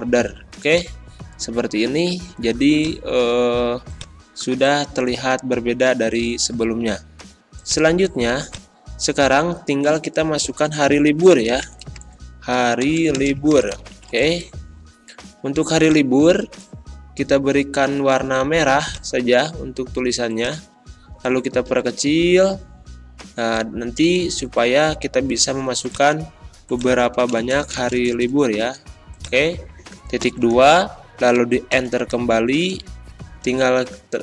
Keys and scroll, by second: 14.6 r, 21.6 ctrl+[, 24.0 ctrl+], 27.1 space, 30.2 shift+;, 31.7 shift+Return.